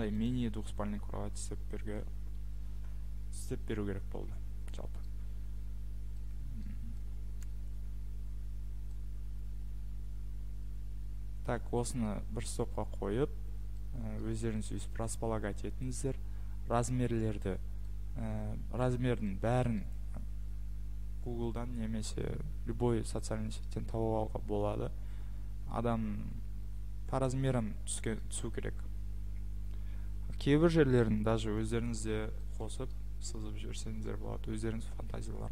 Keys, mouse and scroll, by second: 0.2 click, 3.6 Escape, 4.2 Escape, 6.3-6.6 scroll, 7.4-8.2 scroll, 11.3 scroll, 12.0 scroll, 13.3 scroll, 18.8 scroll, 19.8-20.2 scroll, 28.2-29.6 scroll, 32.5-32.9 scroll.